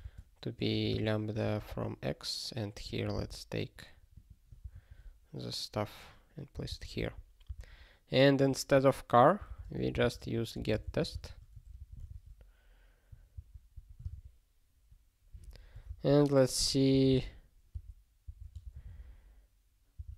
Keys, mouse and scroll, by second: 0.0-1.6 typing, 1.4 ctrl+f, 2.7 click, 3.2 ctrl+alt+k, 4.1 click, 4.2 click, 4.6 ctrl+b, 4.8 ctrl+y, 6.5 ctrl+n, 6.7 ctrl+n, 6.8 ctrl+a, 7.0 ctrl+k, 7.5 ctrl+k, 8.4 click, 9.5 alt+d, 9.6-10.5 typing, 11.7 ctrl+g, 12.5 ctrl+s, 13.3 ctrl+n, 13.7 ctrl+a, 16.9 alt+b, 17.7 alt+d, 18.3 alt+d, 18.5 f.